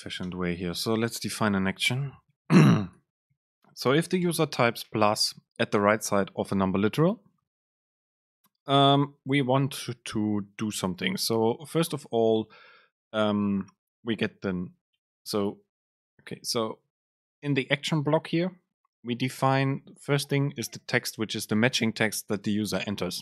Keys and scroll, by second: 0.4 BackSpace, 0.8 super+space, 5.0 Down, 15.1 BackSpace, 16.9 Escape.